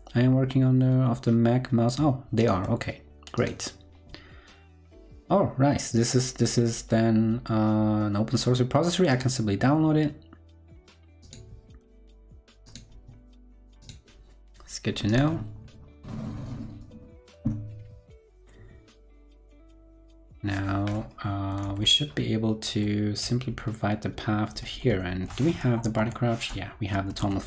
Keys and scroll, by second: 21.6 super+Page_Down, 25.8 shift+super+., 27.1 super+Down.